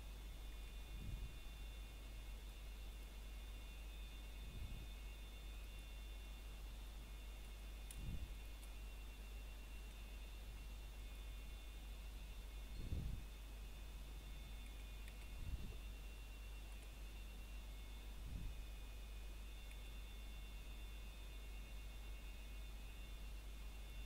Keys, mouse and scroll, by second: 0.3-1.4 scroll up 1, 1.8 ctrl+r, 3.4 click, 4.3 right click, 4.6-5.0 scroll down 1, 5.0 middle click, 5.2 scroll up 1, 6.1 middle click, 7.3 ctrl+Tab, 9.3 click, 10.4 middle click, 10.9-11.3 scroll down 1, 11.3 middle click, 12.8 ctrl+click, 13.2 middle click, 14.2 click, 14.6 middle click, 16.0 shift+click, 17.6 s, 19.0 click, 19.4 middle click, 23.2 a.